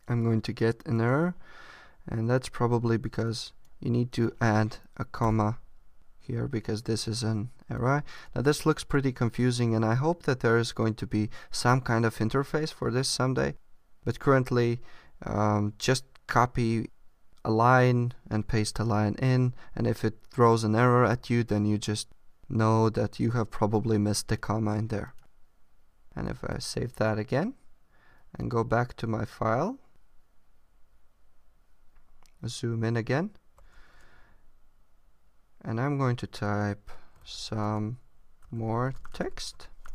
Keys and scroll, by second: 26.2 super+s, 31.8 super+=.